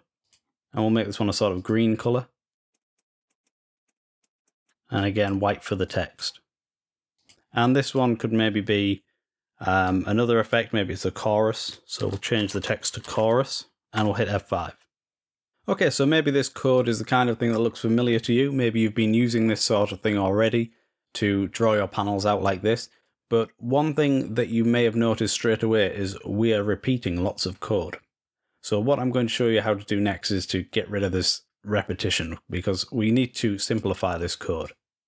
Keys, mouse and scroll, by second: 0.0 click, 1.3 click, 2.3 click, 3.1 click, 3.7 click, 3.9 click, 4.2 click, 4.7 click, 5.6 click, 6.9 click, 7.6 click, 9.6-10.7 drag, 16.5-17.6 drag, 22.8-33.6 drag, 33.7 click.